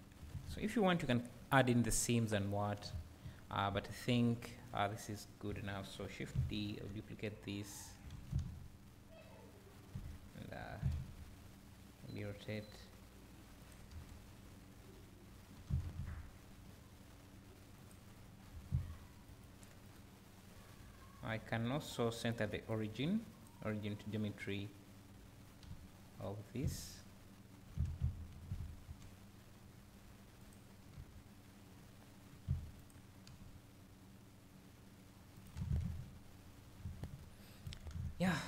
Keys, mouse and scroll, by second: 3.2 `, 4.0 click, 4.3 KP_7, 4.9 scroll down 1, 6.8 shift+d, 10.7 r, 13.7 click, 13.9 KP_1, 15.5 r, 17.9 click, 18.4 r, 19.4 right click, 24.3-30.5 right drag, 25.7 `, 27.7 r, 30.5 click, 31.0 KP_3, 32.3 r, 32.9 click, 33.4 g, 35.5 click, 35.6 alt+a.